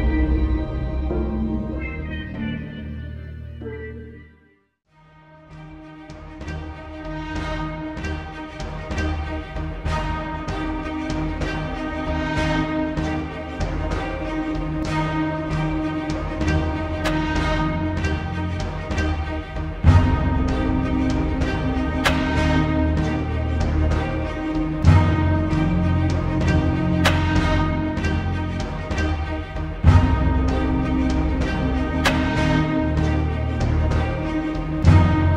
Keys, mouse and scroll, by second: 4.3 alt+scroll up 1, 4.6 space, 4.7-5.3 click, 5.1 space, 6.1 click, 8.9 b, 9.6 right click, 11.1 click, 12.1 Return, 13.1 click, 14.7-15.1 alt+scroll down 1, 16.1-17.7 shift+drag, 20.4-21.3 shift+click, 21.6 Return, 22.4-22.9 alt+scroll up 1, 23.0 space, 23.2 click, 23.5-24.1 space, 24.5 click, 24.8 alt+scroll down 1, 25.3 alt+scroll up 1, 25.3 space, 25.4 click, 26.1 right click, 27.3 click, 28.0-28.6 alt+scroll up 1, 28.9 space, 29.1 click, 29.4-29.7 space, 30.1 click, 34.4 t, 35.1 click.